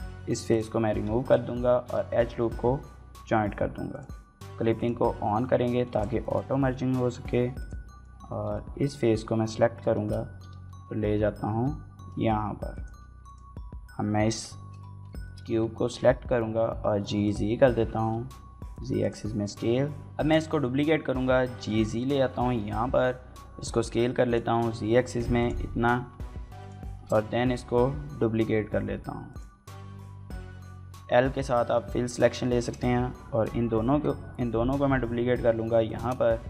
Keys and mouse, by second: 0.0-2.4 typing, 1.0 alt+click, 1.3 middle click, 3.7 click, 4.6 click, 5.0 g, 5.3 y, 5.7 click, 6.0 shift+middle click, 7.1 3, 7.3 click, 7.7 middle click, 8.3 KP_1, 8.7 KP_3, 9.7 shift+middle click, 10.1 g, 10.3 x, 11.3 y, 12.5 click, 13.1-14.1 drag, 14.1 l, 15.0 shift+click, 15.7 z, 17.0 click, 17.3 g, 17.9 z, 18.8 click, 19.1 s, 19.2 z, 19.9 click, 20.8 z, 21.8 click, 22.4 s, 22.5 z, 24.1 click, 24.2 g, 24.5 z, 25.2 click, 25.4 s, 25.7 z, 26.4 click, 26.7 shift+d, 27.2 z, 29.1 click, 31.4 shift+click, 32.4 shift+d, 32.6 z, 35.7 shift+click.